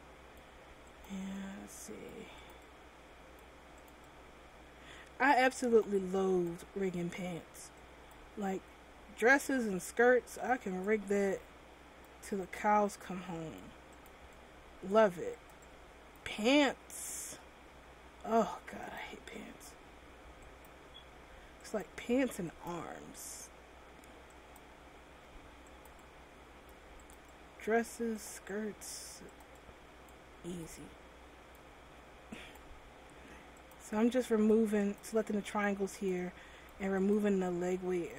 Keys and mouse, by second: 5.9 middle click, 7.0 m, 8.6 m, 17.2-19.0 middle drag, 19.7 m, 25.1 m, 26.2-31.0 drag, 31.9 m, 33.1 m.